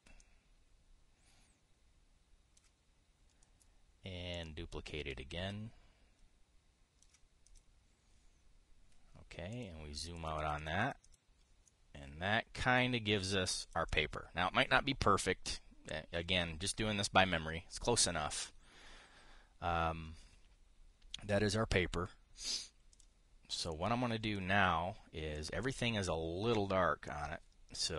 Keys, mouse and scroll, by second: 0.0 middle click, 0.1 middle click, 0.9 ctrl+click, 2.6 ctrl+click, 6.0-7.8 ctrl+drag, 8.2 click, 10.2 click, 10.9 click, 11.5 click, 14.5-23.6 scroll down 1, 26.3 click, 27.8-27.9 drag.